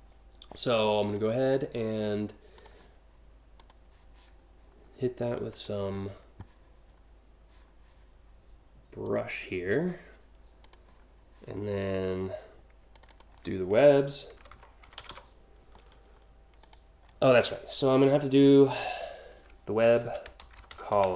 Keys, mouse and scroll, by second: 0.7 click, 2.2 click, 3.2 click, 5.1 click, 8.7 click, 10.2 click, 11.7 click, 12.6 click, 12.7 click, 13.9 shift+w, 14.5 b, 16.2 click, 18.5 BackSpace, 19.6-21.1 typing.